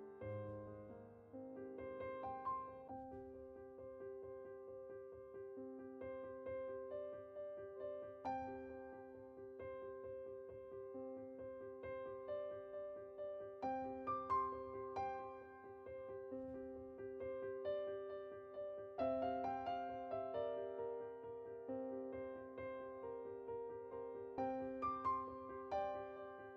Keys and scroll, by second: 0.7 typing, 1.9-2.3 typing.